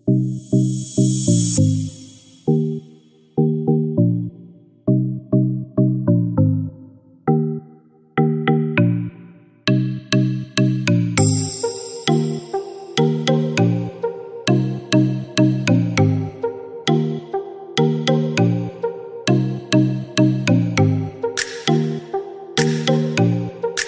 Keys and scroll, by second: 10.5 ctrl+shift+e, 11.6 ctrl+j, 17.0 ctrl+-, 22.9 Delete.